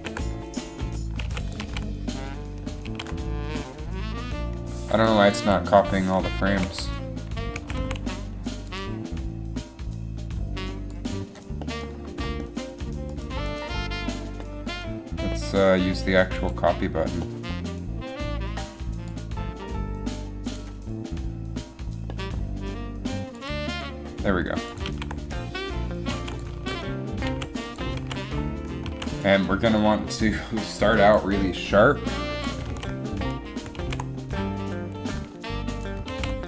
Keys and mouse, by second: 0.0 alt+a, 1.4 alt+a, 1.7 alt+a, 3.1 alt+a, 5.5 Left, 6.8 a, 7.7 a, 8.1 a, 25.0 alt+a, 25.5 alt+a, 26.4 alt+a, 26.6 alt+a, 27.6 alt+a, 28.1 alt+a, 29.2 alt+a, 32.8 alt+a, 33.9 alt+a, 36.2 alt+a.